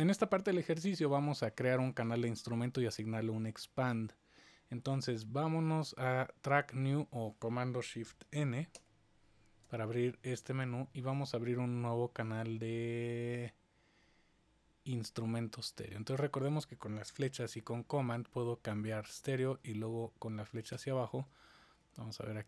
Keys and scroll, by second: 8.7 shift+super+n, 17.5 super+Right, 19.1 super+Down, 19.5 super+Down, 20.7 super+Down, 21.7 super+Up, 21.9 super+Up, 22.1 super+Up.